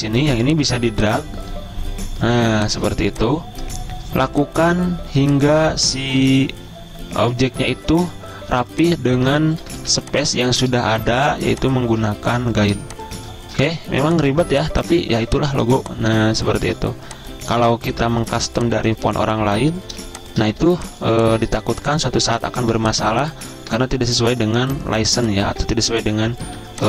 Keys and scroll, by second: 10.2 ctrl+z, 11.4 ctrl+g, 13.9 v, 18.3 ctrl+g, 21.0 z, 21.9 v, 23.0-23.7 typing.